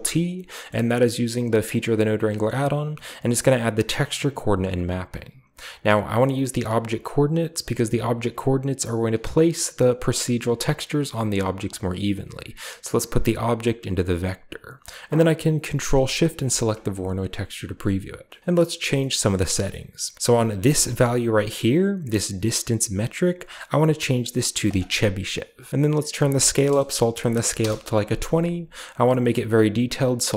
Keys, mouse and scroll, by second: 1.5 drag, 4.0 click, 4.7 click, 9.9 click, 11.4 scroll up 1, 13.0-14.7 drag, 16.3 ctrl+shift+click, 18.3-18.9 middle drag, 18.4-20.1 scroll up 2, 19.1 middle click, 19.6-20.1 middle drag, 20.5-21.2 drag, 24.5 click, 26.1 click, 27.2 typing, 27.4 Return, 29.4-30.3 drag.